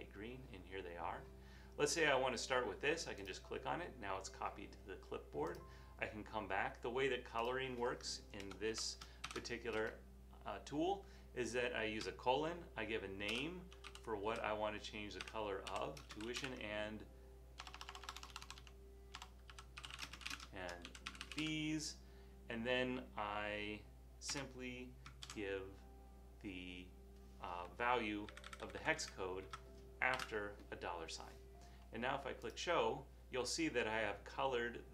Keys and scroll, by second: 8.5 Return, 8.7 Return, 13.2-24.5 typing, 25.3 super+v, 28.5 Left, 28.7 Left, 28.8 Left, 29.0 Left, 29.5 Left, 30.2 #.